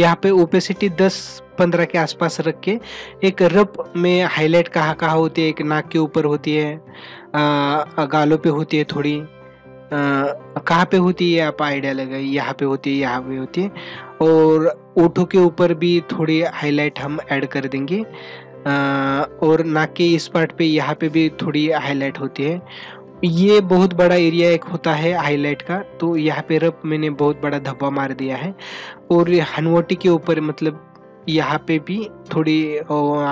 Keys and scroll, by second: 11.0 ctrl+alt+z.